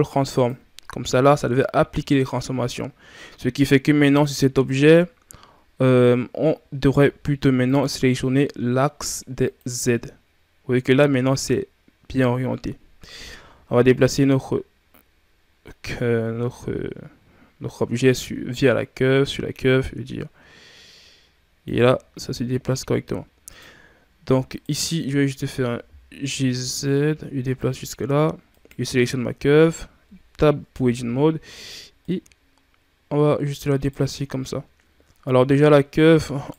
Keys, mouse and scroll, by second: 4.5 right click, 7.5-10.5 drag, 13.7-16.7 drag, 22.1 ctrl+z, 23.3 right click, 24.3 right click, 25.2 g, 28.4 right click, 29.2 Tab, 30.5 KP_3, 31.9 right click, 34.0 shift+scroll down 5, 35.1 right click.